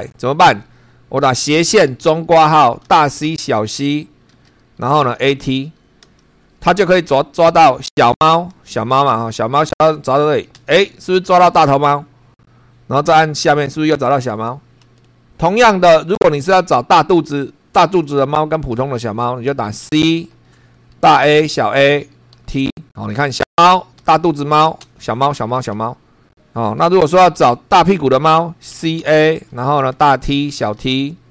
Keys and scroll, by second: 0.0 super+3, 1.4 /, 1.9 [, 2.8 shift+c, 4.3-5.7 typing, 6.0 Return, 7.9 n, 10.5 n, 13.0 n, 14.1 n, 19.2-22.3 typing, 23.4 Return, 24.0 n, 24.8 n, 27.4 /, 28.5-30.8 typing.